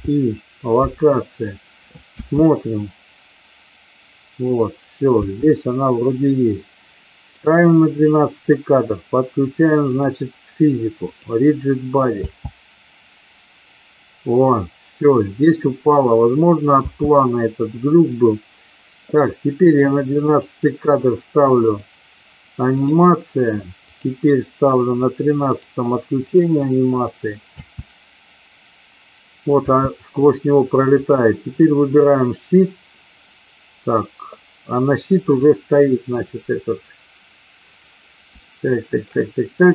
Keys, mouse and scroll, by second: 2.1 space, 5.1 space, 10.0 click, 11.0 click, 12.2 space, 16.9 space, 20.3 click, 21.6 click, 23.7 click, 25.5 click, 26.4 click, 27.5 space, 30.9 click, 38.4 shift+middle click.